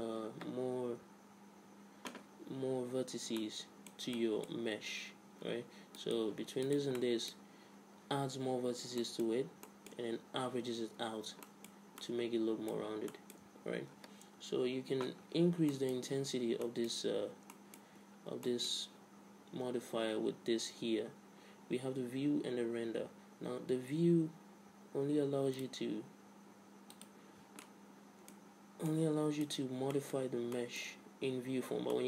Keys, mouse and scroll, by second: 3.5-6.0 middle drag, 5.2 a, 6.0-9.0 right drag, 7.1-8.6 middle drag, 9.1-11.5 middle drag, 11.6 middle click, 11.8 z, 15.0-16.2 middle drag, 16.3 Tab, 17.3 Tab, 18.1 a, 25.6-28.8 drag, 27.7 middle click, 28.5 middle click, 28.6-32.0 middle drag, 31.6 Tab.